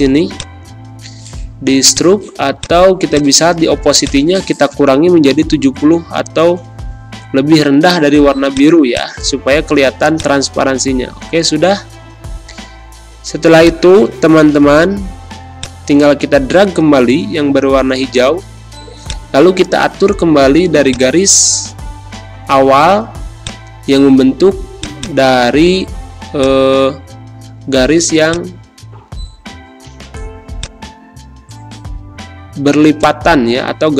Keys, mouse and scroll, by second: 0.3-5.5 shift+drag, 5.5 shift+7, 6.4 shift+Return, 8.5 shift+click, 9.6 shift+z, 10.1-11.8 shift+drag, 11.8 shift+space, 12.0 shift+click, 12.8 shift+v, 13.6-22.0 shift+drag, 22.0 ctrl+z, 23.3-32.7 drag, 32.7 space, 33.0 click, 33.2 space.